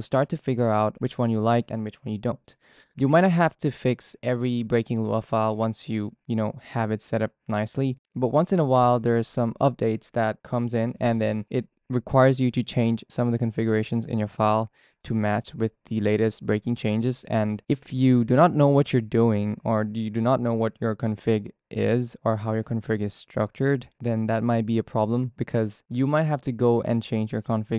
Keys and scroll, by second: 13.3-15.5 typing, 16.0 ctrl+d, 16.2 ctrl+d, 16.7-18.8 typing, 20.1 shift+v, 21.4-27.7 typing.